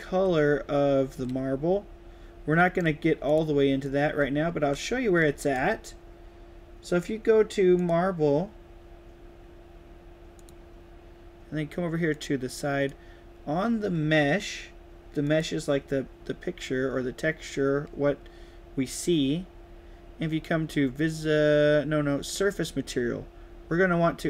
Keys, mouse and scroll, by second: 0.4 d, 1.1-2.7 right drag, 1.1 a, 3.2 right click, 3.8-5.4 right drag, 3.9-5.7 typing, 7.7 click, 10.3 click, 12.0 click, 15.1 click, 22.1 click.